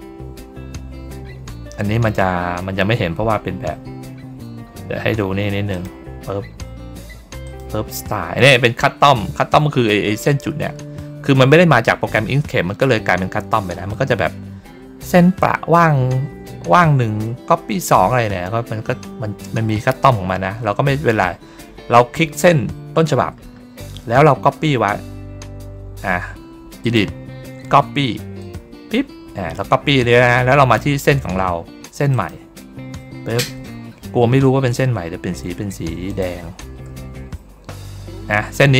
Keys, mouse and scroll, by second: 5.6 click, 7.3 click, 17.1 ctrl+scroll down 1, 18.1-18.7 ctrl+scroll up 1, 18.7 ctrl+scroll down 1, 18.9 ctrl+scroll up 1, 21.1-21.8 ctrl+scroll down 3, 22.3 ctrl+middle click, 26.7 click, 28.3 click, 30.5 ctrl+middle click, 30.6 ctrl+scroll up 1, 32.0 ctrl+click, 33.1 ctrl+scroll down 1, 36.0 shift+click, 37.9 ctrl+middle click, 37.9-38.3 ctrl+scroll up 1, 38.3-38.7 ctrl+scroll down 1.